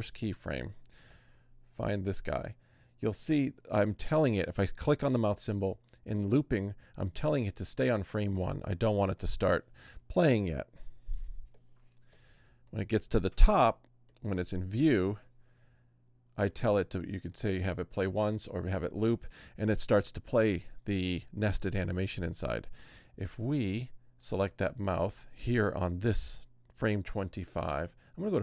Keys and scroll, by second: 10.7 super+-, 11.3 super+space.